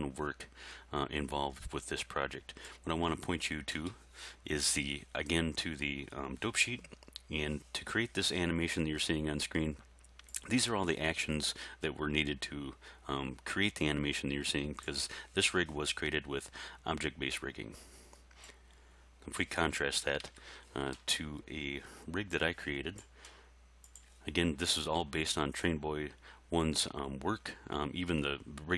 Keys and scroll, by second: 20.2 alt+a.